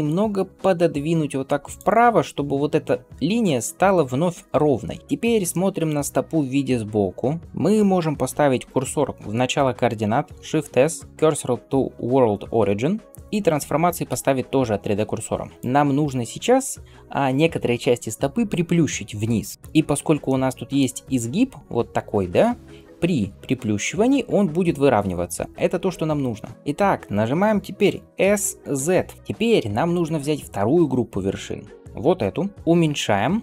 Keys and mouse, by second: 1.6-10.3 middle drag, 10.2 shift+s, 12.5-28.1 shift+middle drag, 15.5-29.2 drag, 23.0 s, 28.1 s, 29.2-31.4 middle drag, 31.4-33.4 drag.